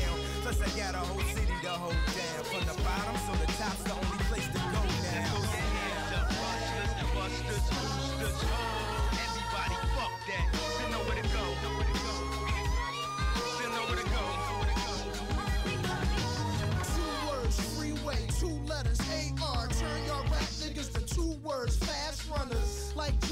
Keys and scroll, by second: 3.7 space, 22.5 space.